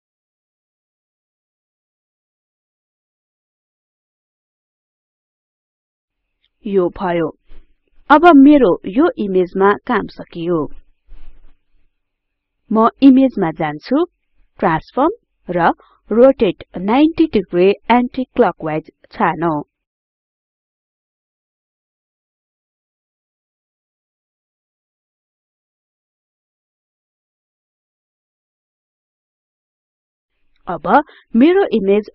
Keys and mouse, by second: 3.6-7.6 drag, 24.1 click, 29.1 click.